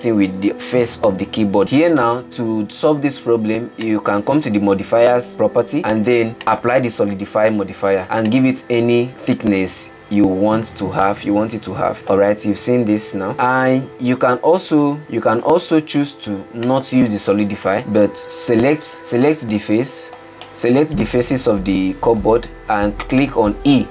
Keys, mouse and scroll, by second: 3.1-5.1 middle drag, 9.1-11.9 drag, 11.9-13.3 middle drag, 13.3-15.5 drag, 17.8-19.5 drag, 20.2 a, 21.4-23.9 middle drag.